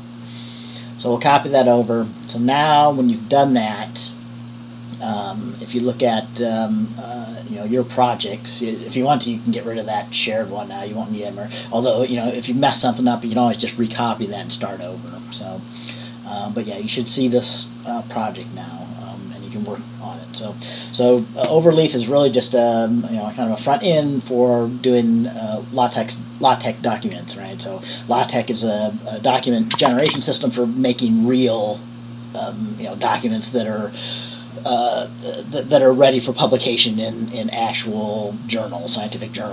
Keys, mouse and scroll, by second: 0.3 click, 3.1-4.4 drag, 6.6-7.8 drag, 9.7-11.5 drag.